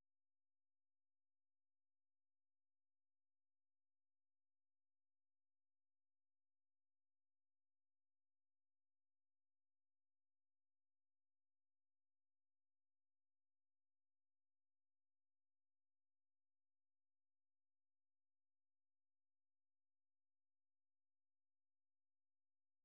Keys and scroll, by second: 0.0-0.6 typing, 0.8 ctrl+a, 2.3-7.5 typing.